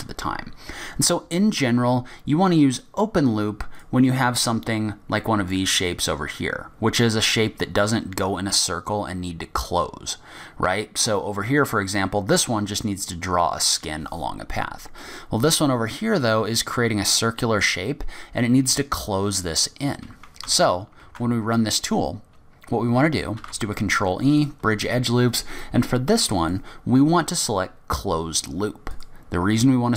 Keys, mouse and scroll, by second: 3.7 click, 4.2-4.7 scroll down 6, 4.7-5.4 scroll up 5, 10.5 scroll down 2, 10.9-12.9 scroll up 3, 12.9-13.6 scroll up 1, 14.2-14.6 scroll down 5, 14.7 scroll up 2, 15.1 middle click, 16.2-17.0 scroll up 2, 16.5 middle click, 18.2-18.6 scroll down 3, 18.5 scroll up 2, 20.4 ctrl+z, 21.0 ctrl+z, 23.3 ctrl+e, 26.8 click.